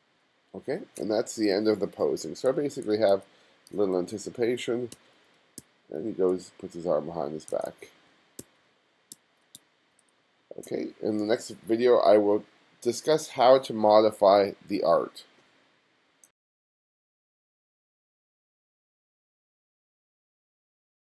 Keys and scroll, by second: 2.5 f, 3.9 g, 5.0 g, 5.6 g, 7.5 f, 8.4 g, 9.2 g.